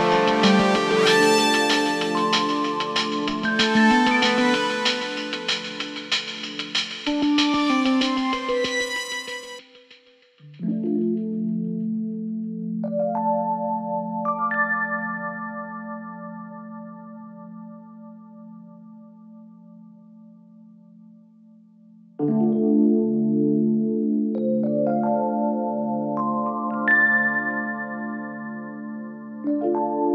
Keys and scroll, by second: 1.4 ctrl+z.